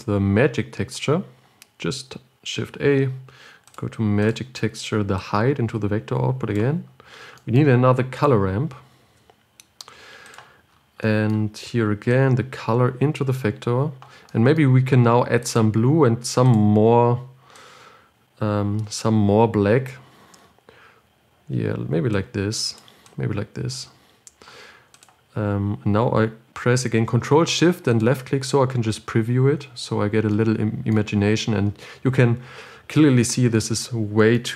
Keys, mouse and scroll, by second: 7.1 click, 7.4 scroll down 2, 7.7 middle click, 8.5 click, 9.4 shift+d, 13.7 click, 18.1 click, 22.5-25.5 drag, 28.7 ctrl+shift+click.